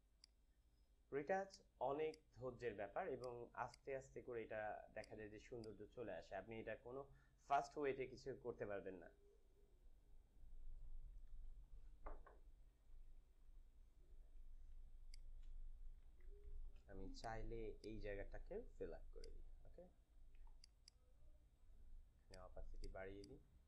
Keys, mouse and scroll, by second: 3.1-8.4 drag, 12.9 click, 13.0 ctrl+-, 14.5-17.8 typing, 17.2 click, 17.6 click, 19.1 ctrl+click, 19.9 s, 20.4 alt+click, 20.5-23.6 alt+drag.